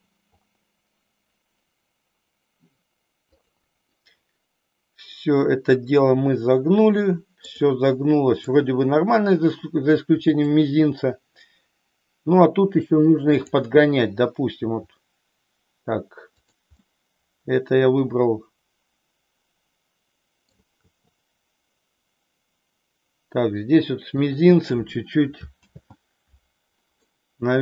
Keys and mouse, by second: 0.1 r, 3.8-7.6 middle drag, 7.7 middle click, 10.3 click, 13.2 click, 14.7 r, 16.8-20.6 middle drag, 20.8 r, 24.2 click, 25.6 ctrl+z, 27.1-27.6 middle drag.